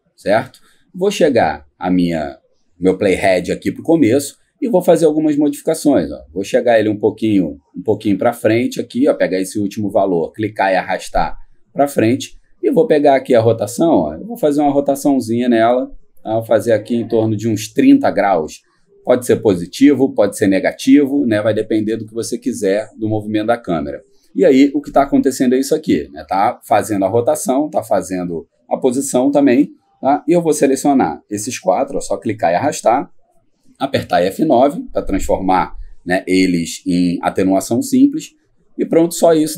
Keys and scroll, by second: 34.1 F9.